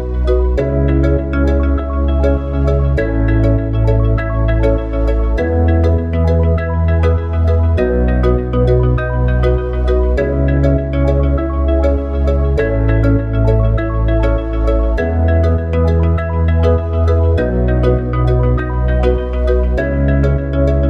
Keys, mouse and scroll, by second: 9.0 click, 11.0 click, 12.0 s, 14.8 s.